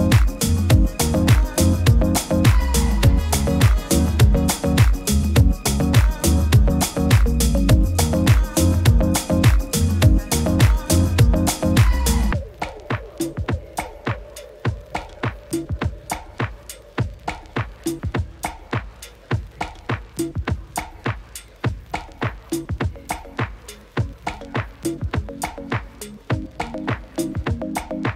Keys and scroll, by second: 0.1 super++, 0.3 super++, 5.7 super+-, 5.9 super+-, 6.0 super+-, 6.4 super++, 8.8 alt+z, 16.0 alt+z, 27.9 super++, 28.0 super++.